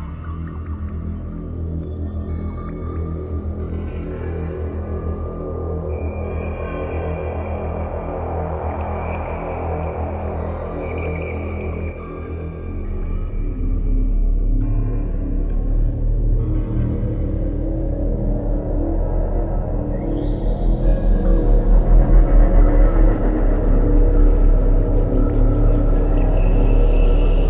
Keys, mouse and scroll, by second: 0.7 s, 3.8 click, 5.3-5.7 scroll up 3, 11.9 Escape, 13.5 right click, 15.3 click, 22.3 click, 23.6 click, 26.3 click, 26.4 click.